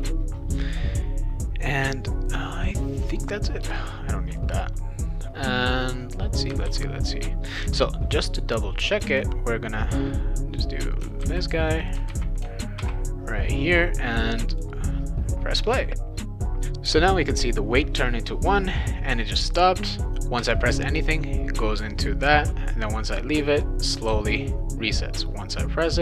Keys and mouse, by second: 3.1 click, 3.6 BackSpace, 6.6 ctrl+s, 9.0 click, 9.8-11.1 drag, 11.2 ctrl+c, 11.8 click, 12.1 ctrl+v, 12.8 ctrl+s, 14.5 click, 20.3 w, 24.1 s.